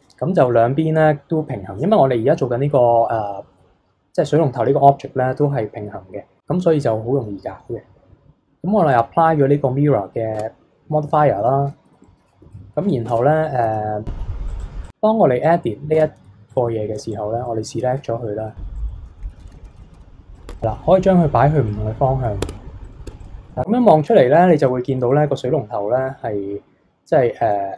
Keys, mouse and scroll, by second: 0.2-0.5 scroll up 2, 0.5 KP_3, 8.9-10.3 drag, 10.3 Tab, 11.1-12.0 middle drag, 12.0 KP_1, 12.4 KP_3, 13.0 Tab, 14.5 click, 15.4 click, 15.9 Tab, 16.5 click, 16.9 b, 18.0 KP_3, 18.7 click, 18.9-19.3 middle drag, 19.3 ctrl+KP_3, 19.6 ctrl+KP_1, 19.9 r, 20.5 Tab, 20.5-22.4 middle drag, 22.4 Tab, 22.7 scroll down 2, 22.8 middle click, 23.1 Tab, 23.2 click, 23.3 scroll up 1, 23.5-24.6 middle drag, 24.6 KP_1, 25.1-27.7 middle drag.